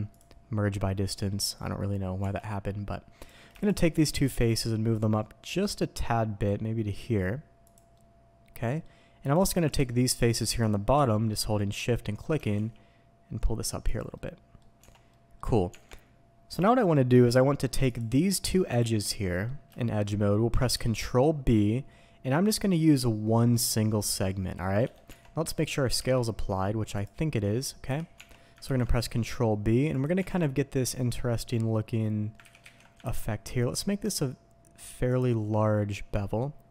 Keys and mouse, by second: 1.1 click, 2.2 Tab, 3.2 click, 3.6 shift+drag, 3.9 click, 4.2 g, 4.3 z, 7.6 click, 7.9-8.8 middle drag, 10.1 shift+click, 10.5-10.9 shift+drag, 11.1-12.2 middle drag, 12.3 g, 12.5 z, 13.8 click, 14.1-14.5 middle drag, 14.8 Tab, 15.1 middle click, 15.2 click, 15.7 Tab, 16.9-17.3 drag, 19.2 drag, 19.7 shift+drag, 20.7 ctrl+b, 24.8 Escape, 25.0 Tab, 25.9 n, 26.9 click, 27.9 n, 28.1 Tab, 28.6 ctrl+b, 29.9 click, 30.3 Tab, 30.5-32.0 drag, 32.5 ctrl+z, 32.6 ctrl+z, 33.0 ctrl+b, 35.0 click, 35.5 drag, 36.1-36.4 drag, 36.4-36.7 middle drag.